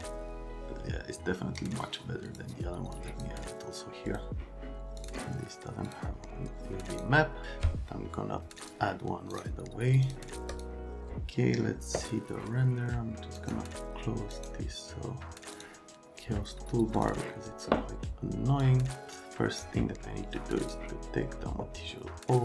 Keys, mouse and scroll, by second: 3.1 click, 4.1 click.